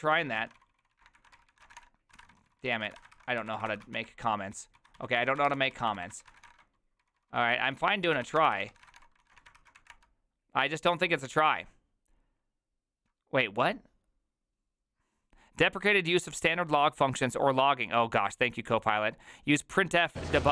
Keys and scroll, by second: 0.0-9.4 typing, 3.1 ctrl+c, 8.5 ctrl+c, 9.6 ctrl+c, 9.8 Up, 9.9 Return, 10.8 ctrl+a.